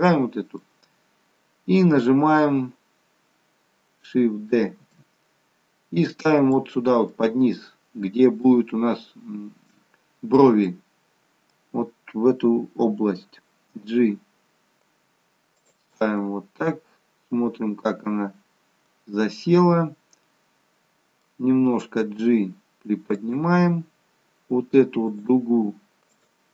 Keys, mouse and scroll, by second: 5.0 shift+d, 7.1 middle click, 10.7 middle click, 15.9 middle click, 15.9 g, 25.1 click, 26.1 click.